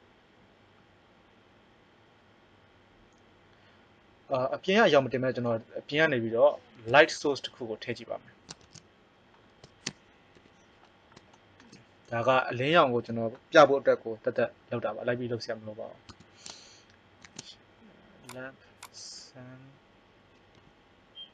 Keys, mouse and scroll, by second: 6.1 middle click, 6.8 KP_1, 8.8 shift+z, 10.3 KP_5, 16.1 Tab, 17.1 shift+a, 20.6 g.